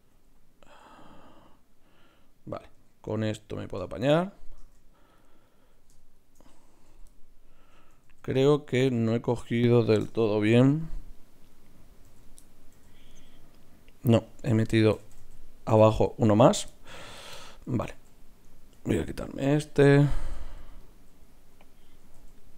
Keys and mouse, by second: 2.7 s, 4.6 ctrl+Tab, 6.9 f, 8.0 ctrl+z, 10.5 f, 12.0 f, 12.7 f, 14.8 ctrl+z, 15.0 ctrl+z, 15.2 ctrl+z, 15.8 ctrl+z, 18.7 ctrl+x, 22.0 ctrl+x.